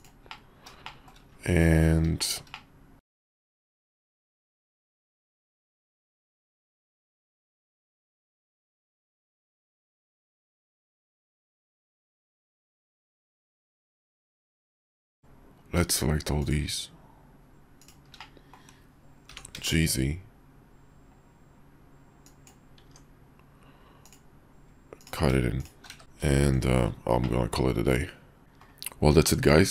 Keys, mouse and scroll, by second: 0.4 click, 0.5 middle click, 0.9 shift+middle click, 1.5 KP_5, 2.3 shift+middle drag, 2.6-3.0 middle drag, 3.2 shift+middle click, 3.7 s, 4.5 Tab, 5.2 s, 10.4 Tab, 11.2 Tab, 11.8 Tab, 12.4 click, 13.2 shift+middle click, 18.2 click, 19.5 g, 22.8 Tab, 25.9 q, 26.4 shift+2, 27.2-28.0 drag, 28.4 middle click, 29.2-29.7 middle drag.